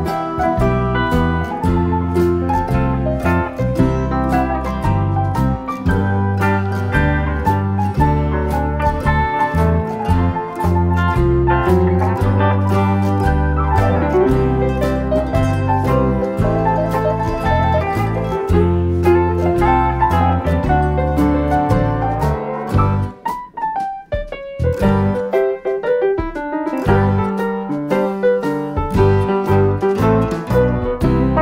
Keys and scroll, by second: 5.1 F1, 7.0 ctrl+-, 9.4 ctrl+d, 13.7 shift+F6, 17.7 F1, 18.3 ctrl+-, 22.5 ctrl+-, 24.0 ctrl+d, 25.3 shift+F6, 29.6 F1, 30.4 ctrl+-.